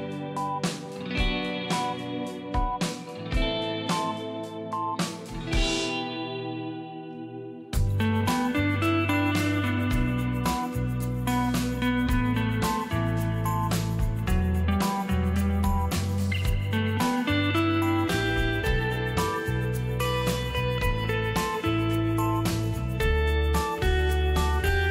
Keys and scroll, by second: 0.5 space, 1.8 z, 2.5 space, 6.8 ctrl+shift+KP_0, 7.3 typing, 8.6 ctrl+KP_0, 11.2-12.0 typing, 13.5-14.6 typing, 20.1 shift+space.